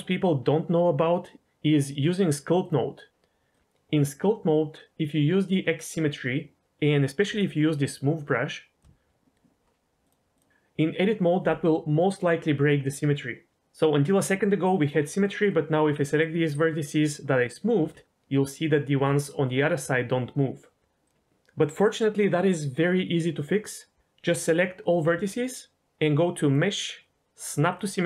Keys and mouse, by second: 2.6-3.5 drag, 5.7 click, 7.7 shift+click, 10.0-10.4 drag, 15.4 click, 17.7 g, 18.9 g, 25.0 a, 26.4-27.7 drag.